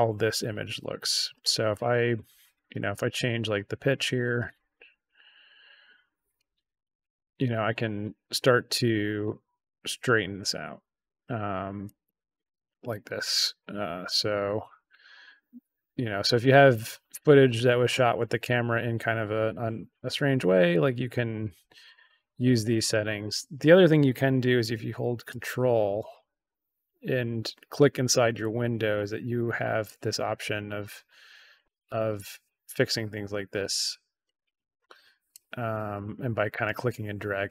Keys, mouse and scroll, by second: 1.9-3.8 drag, 4.7-6.3 drag, 6.8-7.2 drag, 7.6-8.8 drag, 10.0-11.2 drag, 11.8-13.0 drag, 13.5-17.4 drag, 18.5-19.9 drag, 20.6-22.8 drag, 25.2-29.3 ctrl+drag, 29.8-31.5 ctrl+drag, 31.9-33.5 ctrl+drag, 34.2 ctrl+click, 35.9 ctrl+click.